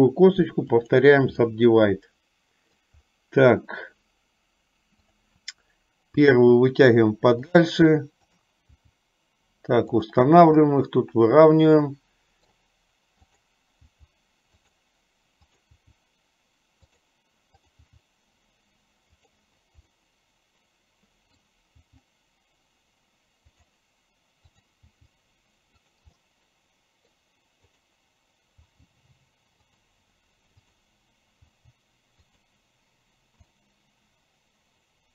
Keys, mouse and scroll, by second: 1.6-3.1 middle drag, 6.3 g, 8.4 click, 9.1 g, 10.9-12.8 middle drag, 13.3 click, 14.1 g, 16.2 g, 20.1-21.7 middle drag, 21.9 g, 25.2 g, 26.3-27.3 middle drag, 27.8 click, 28.7 g, 30.8 click, 31.6 g, 33.7-35.1 middle drag.